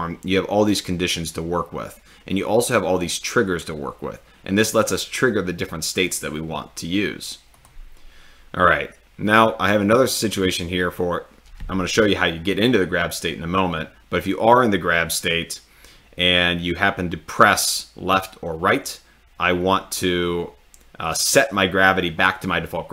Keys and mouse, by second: 7.6-8.2 drag, 21.1 click.